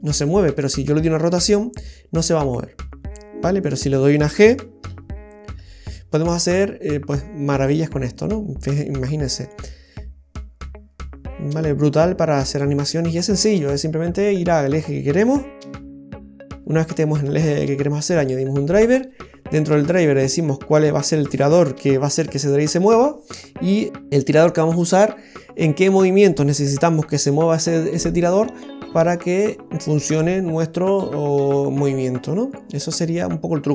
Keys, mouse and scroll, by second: 1.3 r, 4.8 g, 16.7 right click.